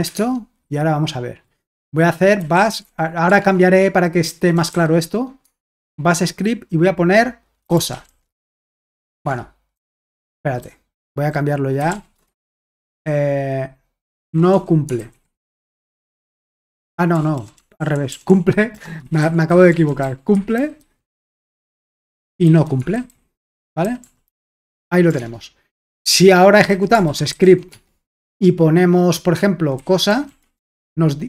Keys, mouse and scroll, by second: 0.2 alt+Tab, 2.1-5.2 typing, 5.4 Tab, 7.4-12.3 typing, 9.3 alt+Tab, 14.0-28.0 typing, 29.5-30.9 typing.